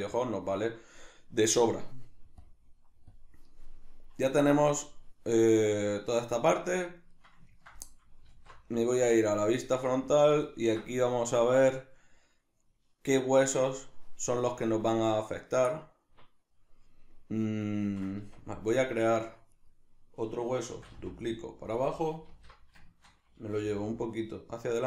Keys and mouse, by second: 2.4-3.2 drag, 3.6-19.1 middle drag, 8.3 alt+q, 19.1 right click, 19.6 right click, 20.7 shift+d, 21.8 click, 22.3 alt+q, 22.9-24.7 shift+middle drag, 23.6 g, 24.7 click.